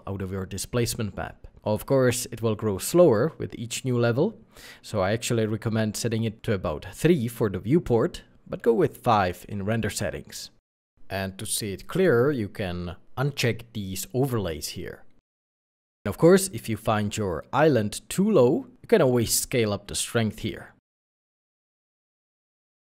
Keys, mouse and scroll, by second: 1.5 Return, 2.8 Return, 6.3-6.9 scroll up 1, 17.3 scroll down 1, 17.7 shift+middle click, 19.8 3, 19.8 KP_5, 19.9 KP_0, 20.0 KP_Enter, 21.3 scroll down 1, 21.7 middle click, 22.4 scroll up 1.